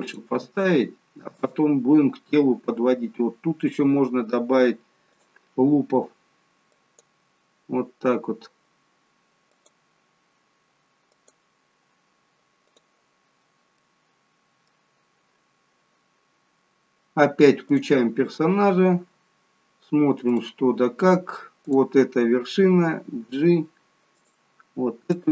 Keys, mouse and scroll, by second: 0.2 click, 0.4 g, 5.2 click, 6.8 click, 11.2 click, 12.8 click, 13.9 middle click, 15.0-15.8 scroll down 1, 17.8 click, 20.5 click, 23.3 g, 25.2 click.